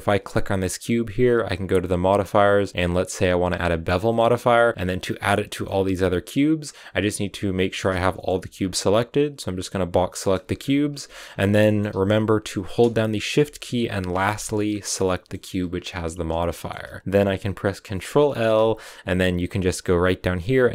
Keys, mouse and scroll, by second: 1.0-3.5 right drag, 3.5 click, 3.9-5.5 middle drag, 5.5-7.2 scroll down 3, 7.2 click, 7.9-9.7 middle drag, 9.7 b, 9.9 shift+middle click, 10.3-11.0 scroll up 6, 11.0 z, 11.1 shift+middle click, 11.3 scroll up 1, 11.4 middle click, 11.9 z, 14.2 shift+right click, 14.4-14.8 scroll up 1, 14.8-16.2 middle drag, 16.2 scroll down 1, 16.3-20.7 shift+middle drag.